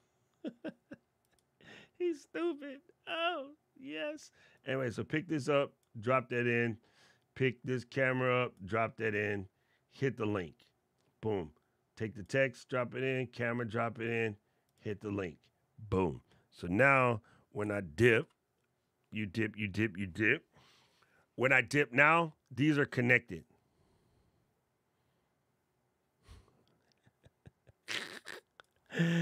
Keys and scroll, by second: 17.9 alt+super+8.